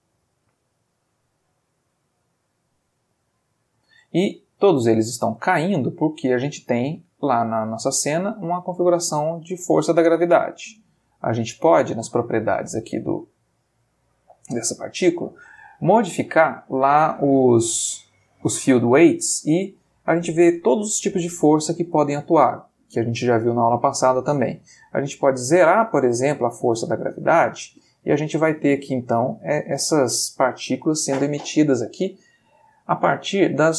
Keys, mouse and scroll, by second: 0.7 click, 1.6 click, 3.6-4.6 middle drag, 5.8 middle click, 7.7 click, 9.4 click, 10.4 click, 11.2 click, 12.8-13.6 middle drag, 18.4 click, 19.1-20.2 middle drag, 25.2-27.3 drag, 28.2-28.7 middle drag, 29.4-30.6 middle drag, 31.1 middle click, 31.6-32.4 middle drag.